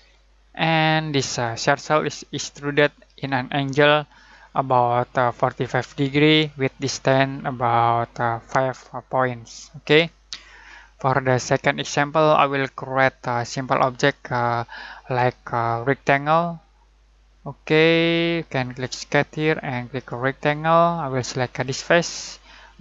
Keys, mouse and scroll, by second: 1.4 scroll up 1, 3.9-4.7 scroll down 1, 10.8-11.4 scroll up 1, 11.4-15.2 middle drag, 16.1 click, 18.3 typing, 18.8 click.